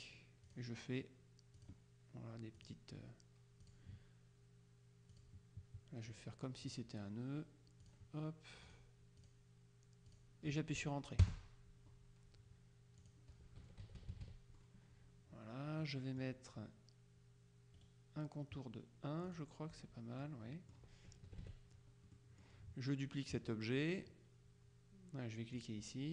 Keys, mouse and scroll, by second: 0.6 click, 1.7 click, 2.7 click, 3.7 click, 5.2 click, 6.2 click, 7.9 click, 8.8 click, 10.2 click, 11.3 KP_Enter, 13.1 click, 13.9 KP_Subtract, 15.9 middle click, 17.8 right click, 19.4 click, 20.3-21.3 middle drag, 21.3 KP_Subtract, 22.2 middle click, 25.7 click.